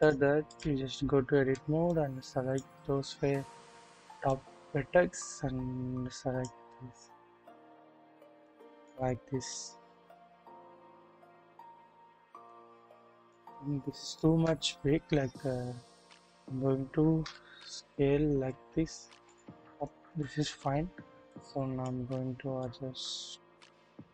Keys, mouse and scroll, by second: 0.1 double click, 0.9 scroll up 2, 1.3 alt+z, 1.9 click, 4.3-6.5 drag, 8.4 click, 9.5-11.6 drag, 12.4 click, 13.3 middle click, 13.9 shift+middle click, 14.3 shift+scroll up 1, 15.0-16.2 scroll up 1, 16.2-17.2 typing, 20.0 KP_1, 20.7-21.3 scroll down 1, 21.3-21.9 drag, 22.7-24.1 drag.